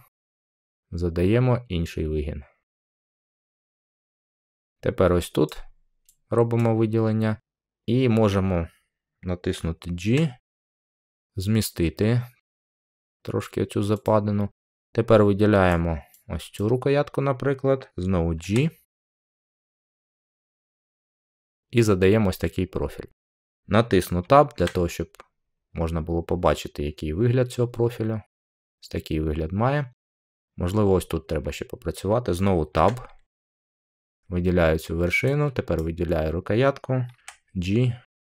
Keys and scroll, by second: 9.9 g, 18.3 g, 24.4 Tab, 32.6 Tab, 37.1 g.